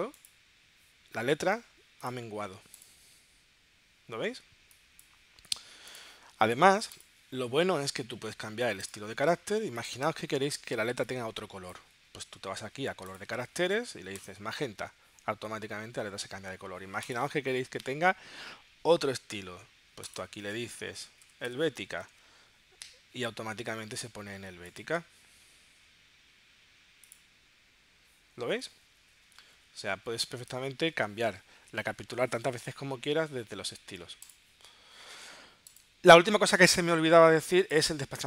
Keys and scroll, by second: 21.2 h.